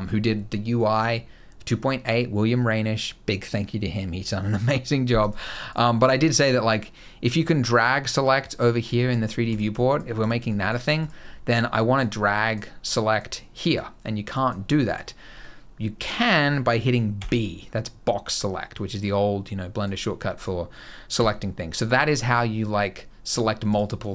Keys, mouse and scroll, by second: 4.9 click, 5.4 click, 5.7 click, 7.2 click, 8.2 click, 8.6 click, 9.2 click, 9.4 click, 9.9 click, 10.2 click, 10.7 click, 11.5 click, 12.1 click, 12.7 click, 13.3 click, 14.1 click, 14.5 click, 16.9 b, 20.1 click, 20.9 b, 21.9 click, 23.4 click, 23.7 click.